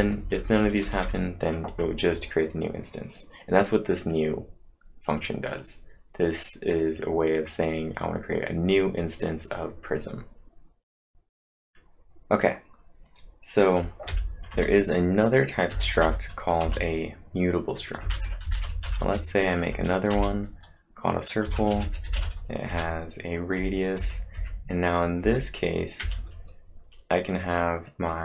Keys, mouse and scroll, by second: 0.2 Down, 0.4 Down, 4.1 click, 4.1-4.5 scroll up 1, 5.1 click, 5.5 click, 6.2 click, 7.5-8.8 scroll up 4, 14.1 typing, 14.5 Return, 15.7 m, 16.6 Return, 17.9-19.5 typing, 19.7 Return, 20.1 Return, 22.0-26.0 typing.